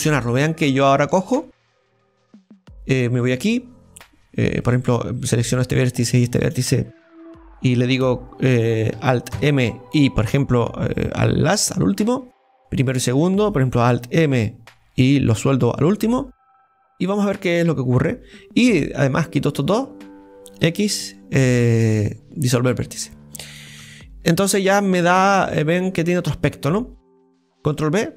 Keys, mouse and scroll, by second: 0.6-1.7 scroll up 7, 1.0 shift+middle click, 3.3 click, 4.6 right click, 6.0 shift+right click, 12.6 right click, 13.1-14.2 shift+right drag, 14.2 alt+m, 16.1-17.1 scroll down 9, 17.1-18.8 middle drag, 18.8-20.6 right drag, 23.0-23.8 scroll down 3, 24.3 Tab, 24.3-27.3 middle drag, 27.8 ctrl+b.